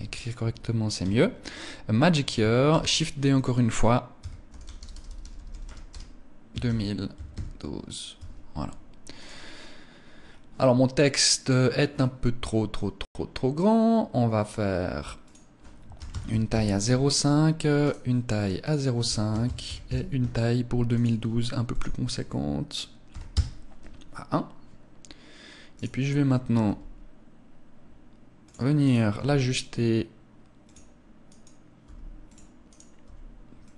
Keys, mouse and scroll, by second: 0.5 Tab, 2.2 shift+d, 2.9 click, 3.7 Tab, 4.0-6.9 typing, 7.7 Tab, 8.7 right click, 9.7 scroll down 1, 10.2 scroll down 3, 10.9 click, 11.4-11.8 scroll down 2, 14.7 click, 17.3 right click, 18.0 click, 20.3 right click, 21.1 click, 25.2 right click, 26.1 g, 27.9 click, 28.3 right click, 28.5 g, 31.3 g, 31.7 click, 32.1 right click, 32.5 g, 33.1 click.